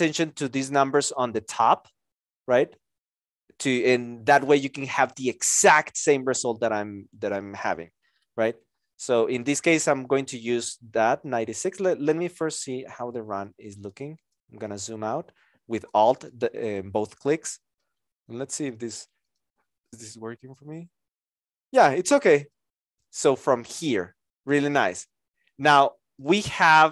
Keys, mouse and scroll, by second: 14.3 alt+click, 15.8 alt+click, 26.5 x, 26.7 Return.